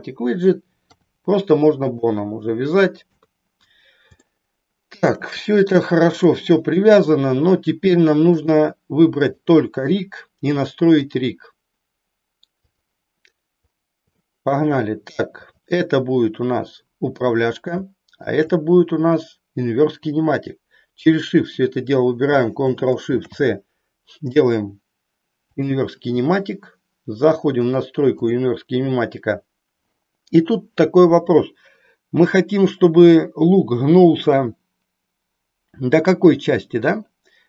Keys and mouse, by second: 0.8 r, 2.0 click, 3.1 KP_3, 4.2 shift+middle click, 6.1-7.1 drag, 8.3 click, 11.0-13.0 drag, 14.2 shift+middle click, 18.1 shift+click, 28.1 click.